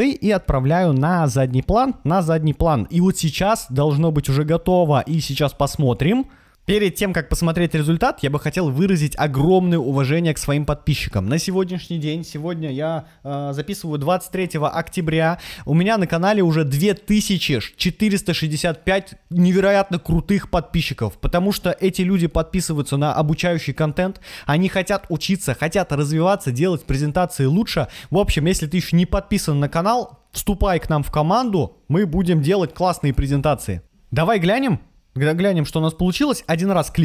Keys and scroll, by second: 36.7 Right.